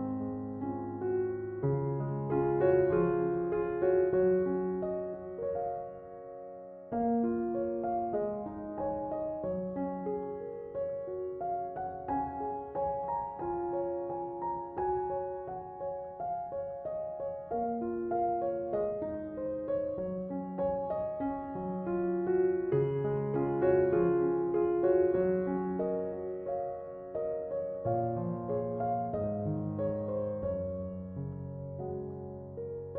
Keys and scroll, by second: 22.2 BackSpace.